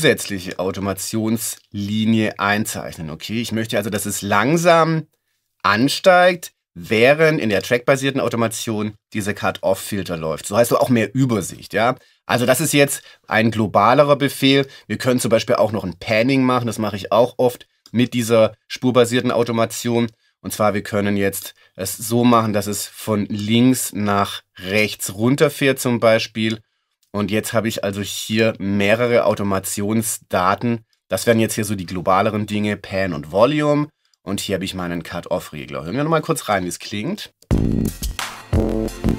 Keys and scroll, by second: 37.4 space.